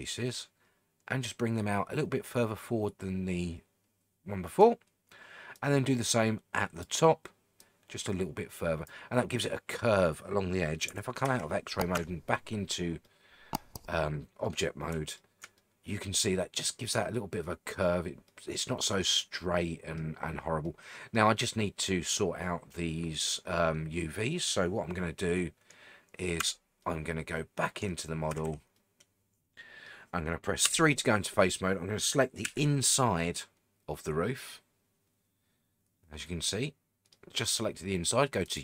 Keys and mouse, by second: 1.2-4.6 drag, 5.6-6.8 drag, 7.7-8.9 drag, 11.2 alt+z, 11.9 Tab, 13.0-14.5 middle drag, 15.2-15.5 shift+middle drag, 15.6-17.8 middle drag, 18.3-19.0 middle drag, 19.2-20.0 middle drag, 20.6-21.2 middle drag, 23.4-26.2 middle drag, 26.4 Tab, 26.8-27.8 middle drag, 28.3 a, 28.5 a, 28.7-29.9 middle drag, 30.6 3, 32.4 l, 33.0-37.1 middle drag.